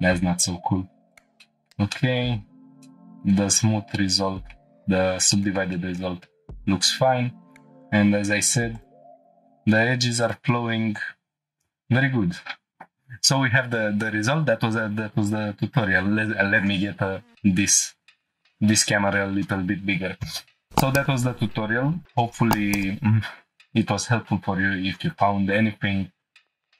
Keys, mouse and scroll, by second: 1.1 click, 1.4 middle drag, 1.9-2.2 shift+middle drag, 2.3 scroll up 3, 2.8-3.2 shift+middle drag, 3.9-4.6 middle drag, 3.9 scroll down 1, 4.6 scroll down 1, 5.3 middle drag, 5.3 scroll down 2, 5.7-6.0 shift+middle drag, 6.8 Tab, 8.7 click, 9.8 ctrl+r, 11.4 right click, 11.6 ctrl+z, 12.6 scroll down 1, 12.7 Tab, 12.7 shift+middle click, 12.8 scroll up 1, 16.3 \, 19.0 ;.